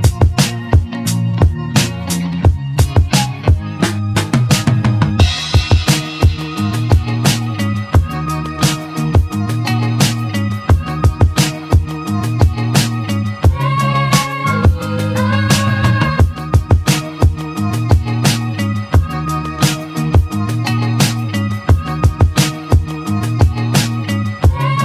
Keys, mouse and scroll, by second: 0.0 click, 3.2 r, 13.2 click, 13.7-14.3 scroll down 2, 14.3-16.9 middle drag, 19.1-19.5 scroll up 3.